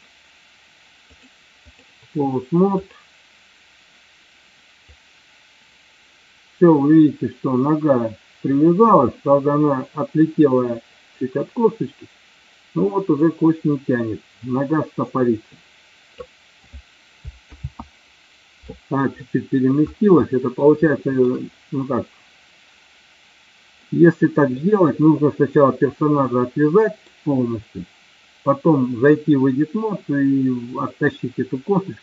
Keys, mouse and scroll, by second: 1.2-1.8 drag, 5.0-16.3 drag, 17.7 ctrl+z, 19.2-19.7 middle drag, 20.3-20.7 middle drag, 20.9 shift+middle drag, 23.9-24.7 middle drag, 26.2-27.1 middle drag.